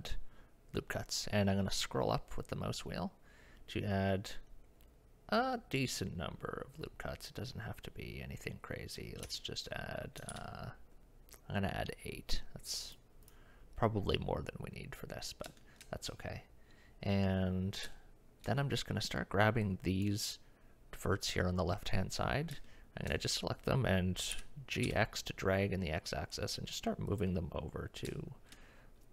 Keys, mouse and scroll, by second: 10.3 ctrl+r, 15.6 shift+middle click, 18.0 shift+middle click, 19.7 click, 22.7 shift+middle click, 24.3 g, 28.1 shift+middle click.